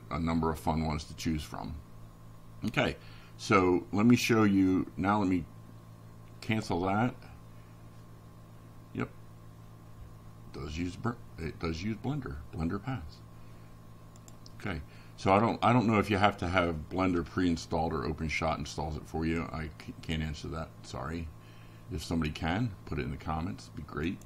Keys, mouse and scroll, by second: 0.9 right click, 4.8 click, 7.2 click, 11.6 click.